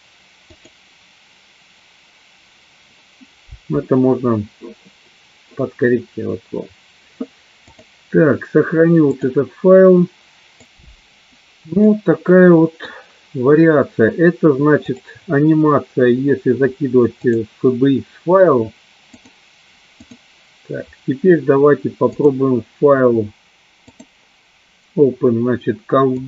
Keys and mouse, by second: 1.0 click, 7.8 click, 9.3-10.6 drag, 12.0-13.0 middle drag, 15.0 click, 17.4 click, 19.3-20.6 drag, 22.2-23.5 drag, 24.1-26.2 drag.